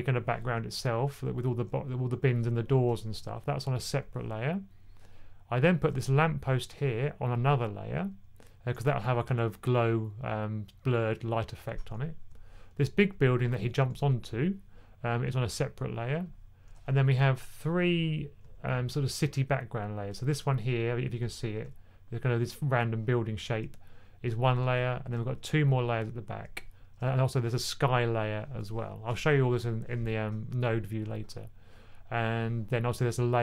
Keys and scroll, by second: 13.5 1, 16.7 typing.